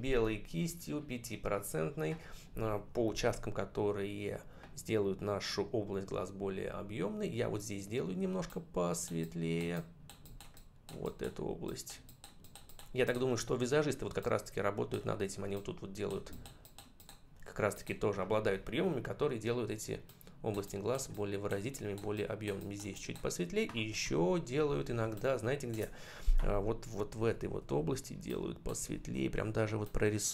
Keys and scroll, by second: 23.8 ctrl+=, 24.8 space, 27.0 [.